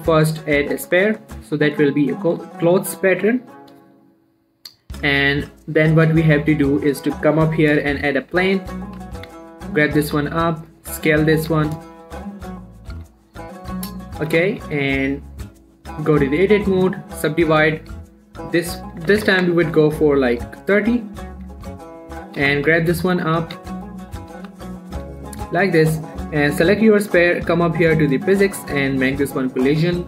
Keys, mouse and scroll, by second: 1.5 click, 1.8 middle click, 2.0 scroll up 1, 2.3 right click, 2.6 click, 2.9 shift+middle click, 4.5-4.8 scroll down 1, 4.8 middle click, 6.4 shift+a, 8.0 click, 8.9 f, 9.3 g, 9.6 z, 10.2 click, 10.4 s, 11.0 click, 11.3 middle click, 11.8 ctrl+a, 12.1 click, 12.5 s, 13.0 click, 13.3 ctrl+a, 13.4 ctrl+click, 13.7-14.0 scroll down 1, 14.0 middle click, 16.3 Tab, 16.8 right click, 17.5 click, 21.5 click, 21.7 Tab, 22.1 middle click, 22.5 scroll up 1, 22.7 g, 22.9 z, 23.2 click, 23.5 middle click, 23.6 scroll up 1, 23.8 ctrl+a, 24.2 click, 24.5 g, 24.8 z, 25.1 click, 25.3 ctrl+a, 25.5 click, 29.5 middle click, 29.8 click.